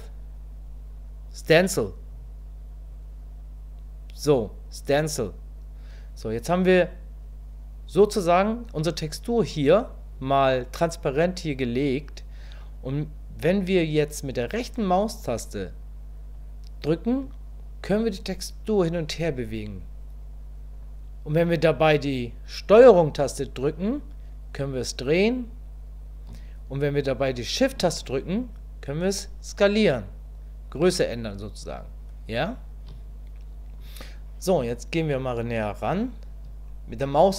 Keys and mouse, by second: 23.8-26.3 ctrl+drag, 28.0-33.0 shift+drag.